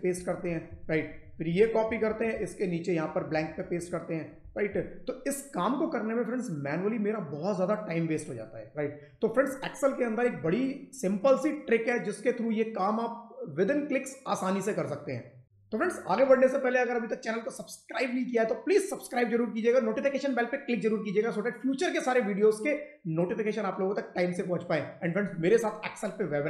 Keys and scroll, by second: 0.0 shift+Up, 0.6 ctrl+v, 0.8 Left, 1.2 ctrl+Up, 1.7 ctrl+c, 1.9 Down, 4.6 ctrl+v.